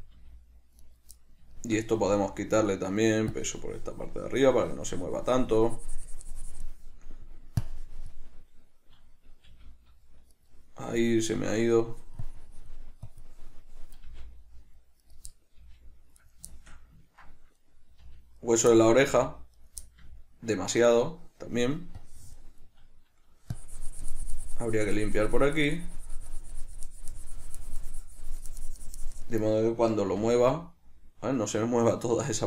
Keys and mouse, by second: 0.0 right click, 0.2-1.2 middle drag, 0.4 g, 1.2 right click, 1.4-2.9 middle drag, 2.2 g, 2.9 right click, 3.6-10.7 drag, 9.7 g, 10.7 right click, 11.7-15.4 drag, 14.3 g, 15.4 right click, 15.6-16.6 middle drag, 15.9 g, 16.6 right click, 16.9-17.9 shift+middle drag, 17.9 right click, 18.3 g, 18.8 right click, 19.0 shift+middle click, 19.3 g, 19.9 right click, 20.1-22.3 ctrl+middle drag, 22.3-32.3 drag, 32.3 right click.